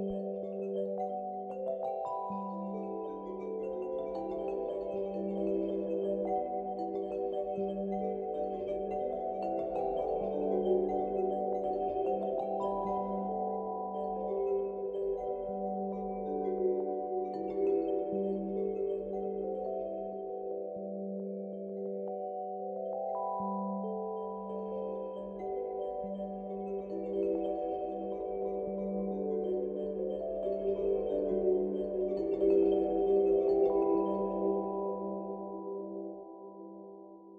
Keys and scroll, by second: 15.1 ctrl+z, 26.6 alt+w.